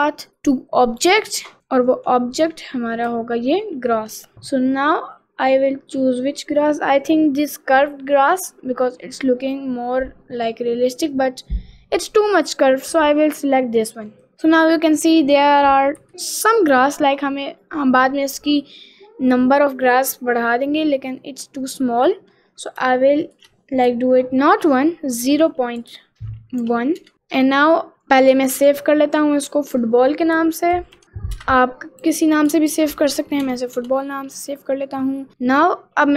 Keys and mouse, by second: 1.6 alt+middle click, 2.4 middle click, 5.3 middle click, 9.5 click, 14.3 middle click, 15.9 KP_Decimal, 16.1-17.7 middle drag, 17.8 middle click, 20.0 middle click, 20.9 middle click, 21.3 middle click, 23.2 click, 25.5-27.0 drag, 28.6 ctrl+s, 34.8 middle click.